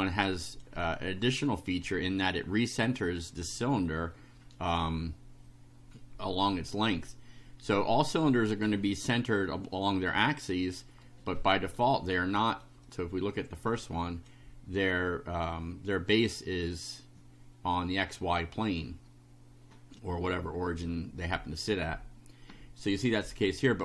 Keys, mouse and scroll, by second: 11.1 right click, 12.0 right click, 12.8-14.5 drag, 20.0 click, 21.3 click, 23.1-23.8 drag.